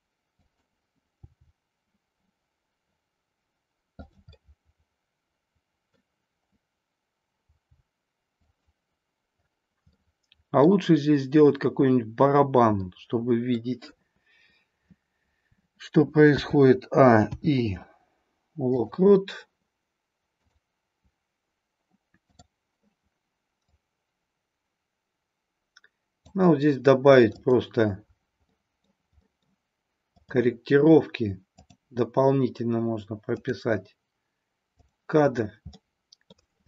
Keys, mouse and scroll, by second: 0.3 click, 1.2 g, 4.0 click, 4.3 scroll up 1, 4.4-6.1 middle drag, 7.4 g, 8.4 click, 9.9-10.7 middle drag, 12.8-13.5 middle drag, 16.3 a, 17.3 i, 20.4 click, 22.2 click, 23.5-26.3 drag, 27.3 click, 28.6 middle click, 29.3 middle click, 30.2-33.3 drag, 34.7 click, 35.7-36.3 middle drag.